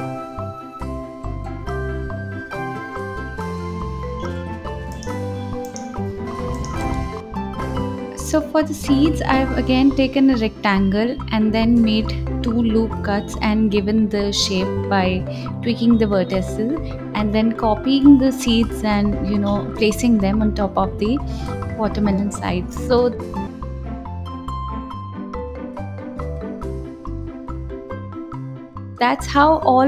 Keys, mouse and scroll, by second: 0.1 click, 0.9-4.9 typing, 1.2 click, 1.3 scroll down 2, 1.5 click, 2.1 click, 2.3 scroll up 3, 3.2 click, 3.2 scroll down 1, 3.4 click, 4.7 ctrl+s, 4.8 scroll up 3, 5.2 scroll down 2, 5.5 click, 6.1 click, 6.2 shift+a, 6.5 s, 6.8 g, 7.0-8.4 drag, 8.7 ctrl+r, 9.0 click, 9.3 g, 9.7 ctrl+z, 9.9 click, 10.2 g, 10.8 click, 11.1 g, 11.8 click, 12.1 right click, 12.3 s, 13.0 click, 13.5 click, 14.0 shift+click, 14.2 m, 15.8 click, 16.1 click, 16.7 click, 16.9 click, 17.4 click, 18.8 click, 18.9 click, 19.1 click, 19.5 click, 19.8-27.8 typing, 20.8 alt+z, 22.0 click, 26.8 click, 28.0 click, 28.1-29.0 scroll down 2, 29.0 Left, 29.3 Left, 29.7 click.